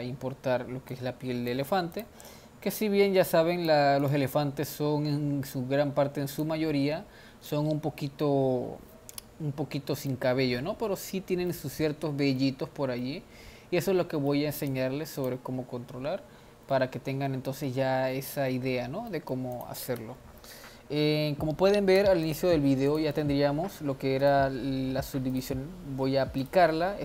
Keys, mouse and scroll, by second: 0.1 click, 0.8 click, 1.9 click, 2.8 click, 5.5 drag, 7.4-10.9 middle drag, 10.9-11.2 scroll up 1, 11.2 scroll down 1, 13.0-14.6 middle drag, 14.6 click, 15.2-16.6 drag, 16.7-18.6 middle drag, 18.6-19.1 scroll down 2, 19.1-19.6 middle drag, 19.6 click, 20.0 Tab, 20.5-21.9 middle drag, 21.9 Tab, 22.2 drag, 22.9-23.8 drag, 24.2-27.0 drag.